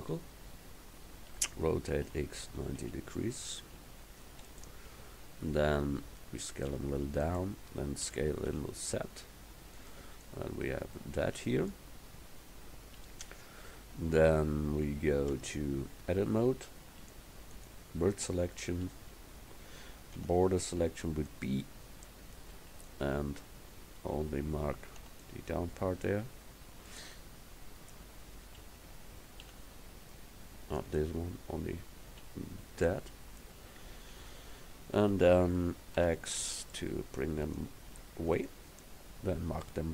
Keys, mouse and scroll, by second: 1.4 r, 6.8 s, 8.1 s, 10.3 click, 11.0 click, 15.4 Tab, 18.8 a, 20.2 b, 24.1 a, 25.1 b, 29.5 c, 32.1-34.2 drag, 34.2 KP_1, 36.1 x.